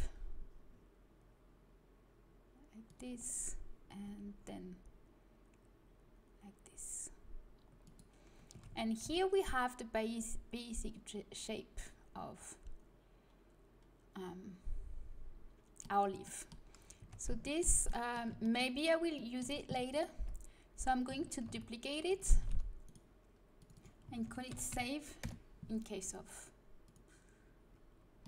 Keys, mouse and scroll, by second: 4.0 g, 8.5 a, 8.6 Tab, 9.0 z, 16.2 middle click, 16.9 Tab, 20.1 Tab, 21.4 shift+d, 22.0-23.7 drag, 22.4 shift+d, 27.1-28.2 drag.